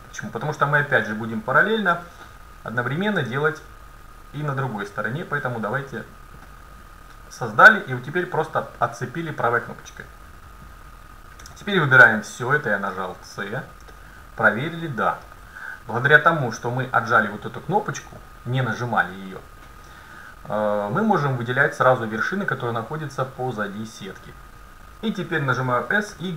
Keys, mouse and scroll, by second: 0.1-1.4 scroll down 1, 1.4 middle click, 1.5 scroll up 1, 2.0 a, 3.1 ctrl+r, 11.5 c, 14.1-15.7 middle drag, 16.0 KP_7, 25.6 s.